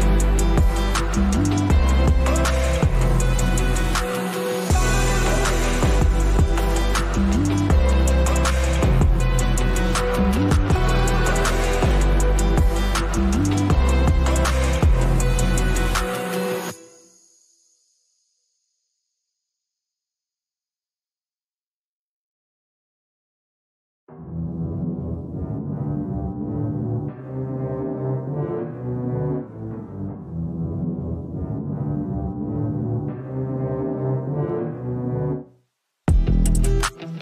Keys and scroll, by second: 14.9 space, 30.3 F1.